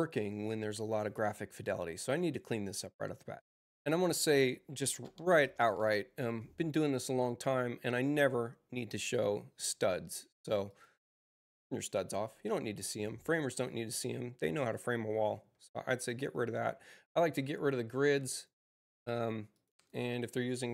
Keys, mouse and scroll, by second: 4.1 click, 4.9-6.1 typing, 7.8 click, 9.1 click, 10.6 click, 14.6 scroll up 2, 14.9 middle click, 18.2 click, 19.4 click, 19.6 click.